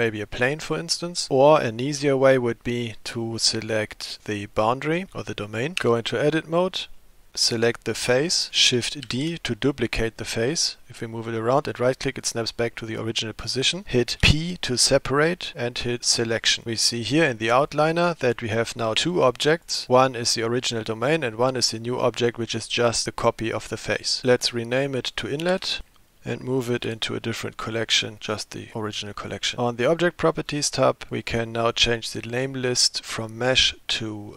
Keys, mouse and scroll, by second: 4.2 click, 5.8 Tab, 7.0 middle click, 7.5 click, 9.1 shift+d, 14.2 p, 16.6 Tab, 18.3 click, 19.6 click, 21.0 click, 25.6 F2, 26.9 m, 30.5 click, 32.1-34.3 drag.